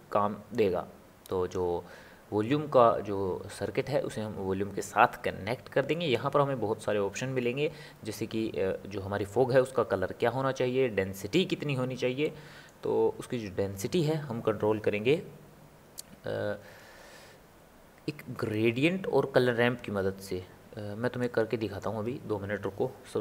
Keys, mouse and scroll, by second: 0.7 click, 6.3 click, 12.2-15.3 middle drag, 21.2-23.2 drag.